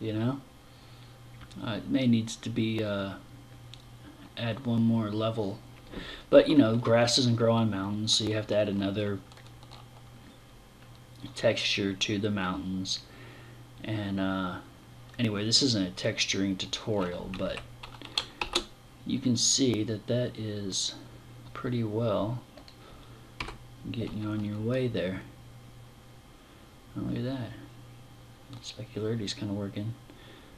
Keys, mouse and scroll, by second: 16.8 Escape, 17.8 shift+f, 22.1 click.